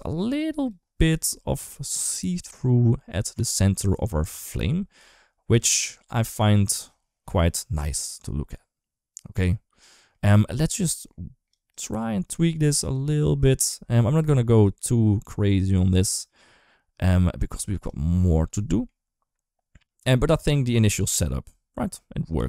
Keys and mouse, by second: 4.8 KP_1, 5.3 KP_3, 8.0-10.5 drag, 10.8 click, 11.5-13.2 drag, 14.4-17.7 drag, 18.4 middle click, 18.5 middle click, 18.6 middle click, 20.7 shift+middle click, 20.8 shift+middle click.